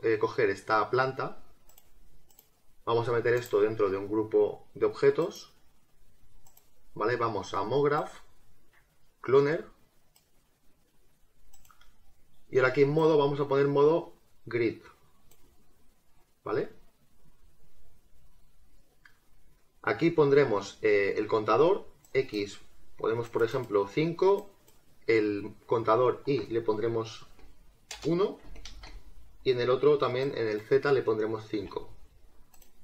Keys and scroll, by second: 27.3 0, 27.9 BackSpace, 28.4 1, 28.8 Return, 31.6 5.